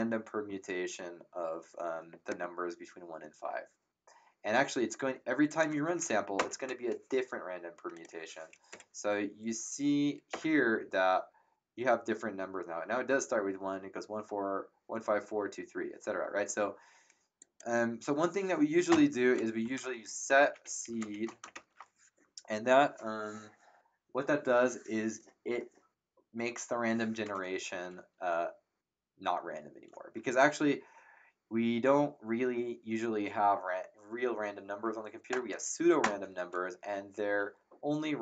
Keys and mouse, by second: 5.4 click, 6.3 ctrl+Return, 6.3 KP_Enter, 7.9 click, 8.7 Up, 9.7 Up, 10.3 Return, 17.4 click, 18.9 Return, 18.9 KP_Enter, 19.4-22.0 typing, 35.3 ctrl+Return.